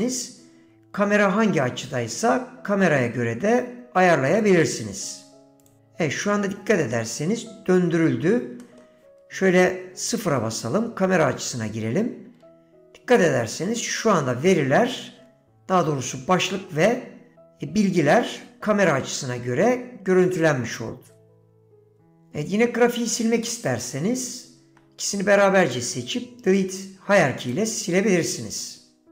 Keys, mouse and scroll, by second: 7.0-8.1 middle drag, 8.7 middle click, 10.5 KP_0, 24.3 shift+click, 25.7-27.6 right drag.